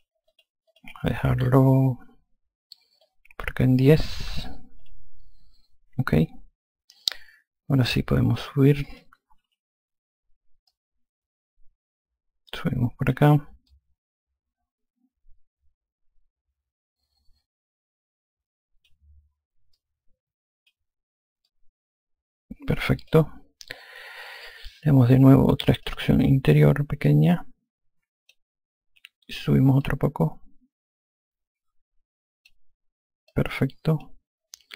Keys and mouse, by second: 3.3 click, 4.4 KP_1, 4.6 KP_0, 5.1 click, 7.4 alt+click, 9.7 e, 11.0 click, 13.9 alt+click, 20.0 click, 21.7 alt+click, 26.1 click, 27.3 click, 30.1 click, 33.6 alt+click.